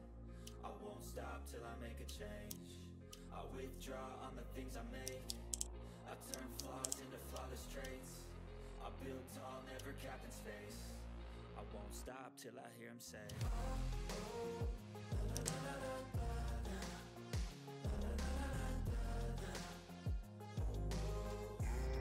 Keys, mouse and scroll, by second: 0.1 click, 0.4-1.0 ctrl+scroll down 2, 0.6 ctrl+middle click, 1.4 click, 2.4 ctrl+g, 2.7-3.3 scroll down 2, 2.8 middle click, 3.3 ctrl+middle click, 3.8 click, 4.0 scroll down 1, 4.2 click, 4.7-6.2 typing, 6.0 click, 6.9 click, 7.5 ctrl+middle click, 7.8-8.1 ctrl+scroll down 1, 8.1 click, 8.3 right click, 8.5 click, 9.4 middle click, 9.8 ctrl+scroll up 1, 9.9 ctrl+scroll down 1, 10.3 ctrl+middle click, 10.3 typing, 10.8 click, 11.5-12.3 typing, 13.3 ctrl+scroll up 1, 13.6 click, 14.9 click, 15.0-15.9 typing, 15.9 click, 16.8 scroll down 1, 17.0 click, 18.1 click, 18.7-19.4 scroll down 1, 19.7 scroll down 1, 19.7 click, 19.7 typing, 20.8 click.